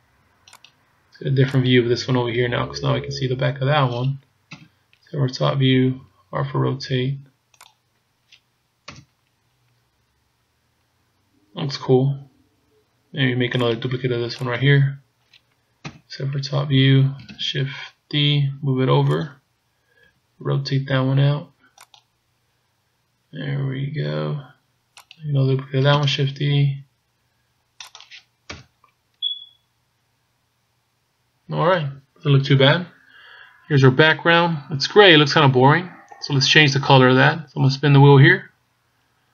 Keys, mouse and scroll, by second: 0.8 right click, 1.7 right click, 4.6 KP_7, 5.9 r, 8.9 KP_0, 13.7 right click, 14.9 right click, 15.9 KP_7, 17.5 shift+d, 20.1 r, 25.0 right click, 26.0 shift+d, 28.6 KP_0, 37.9-38.7 scroll down 5, 38.6-39.3 scroll up 9.